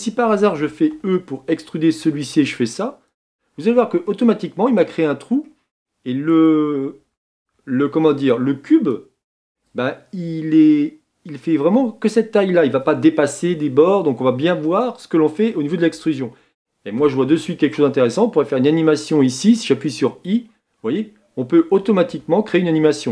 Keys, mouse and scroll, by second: 0.9 e, 3.6 Tab, 4.0-7.0 middle drag, 7.0 Tab, 7.4 Tab, 20.0 i.